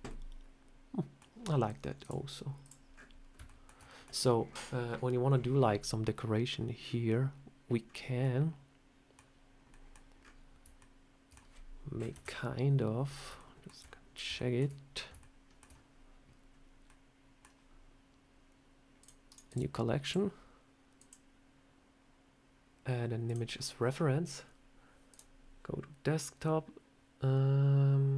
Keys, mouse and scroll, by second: 1.8 click, 2.8-3.3 scroll up 7, 3.3 shift+middle click, 3.6 middle click, 8.0 middle click, 10.6 middle click, 12.0 KP_1, 12.9 scroll up 4, 13.2 shift+middle click, 13.2 shift+middle click, 13.6 shift+scroll down 3, 14.2 shift+middle click, 14.8 scroll up 3, 15.0 shift+middle click, 15.5 shift+scroll down 1, 18.8 click, 19.1 right click, 19.9 click, 20.8 click.